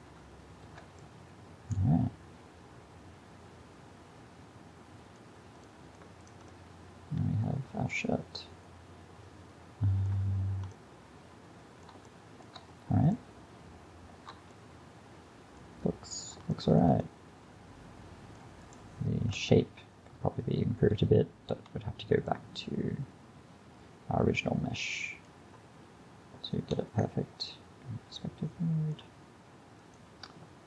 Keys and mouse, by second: 0.8 alt+a, 1.1-3.0 drag, 5.3-5.8 middle drag, 6.3-8.2 middle drag, 11.7-16.8 middle drag, 17.1 middle drag, 17.3 middle click, 18.7 middle click, 19.4 KP_1, 21.5 a, 26.1-27.5 middle drag, 26.8 KP_5.